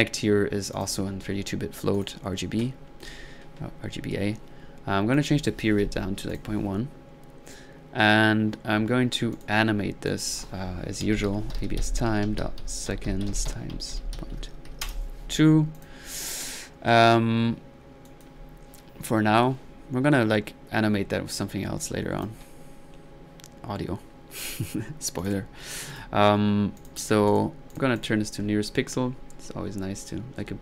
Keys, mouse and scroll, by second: 0.7 drag, 1.9 click, 5.1 click, 5.6 click, 9.3-9.8 drag, 10.1-10.4 drag, 15.8 click, 21.8 click, 25.2-25.6 drag, 25.9-26.3 drag, 26.8-27.6 drag, 27.7 drag, 28.0 click, 28.1 right click, 28.4-29.6 middle drag, 30.3 middle click.